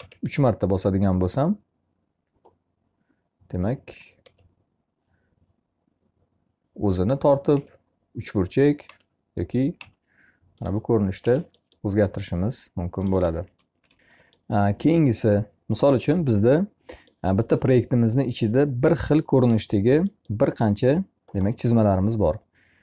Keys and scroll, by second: 10.6 Escape, 13.7 e.